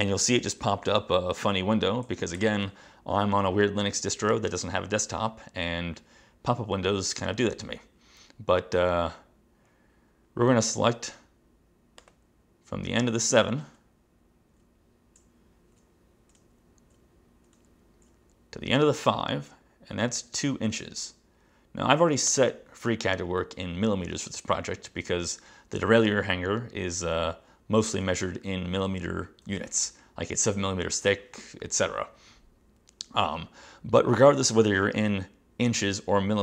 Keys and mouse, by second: 2.5 super+j, 22.4 click.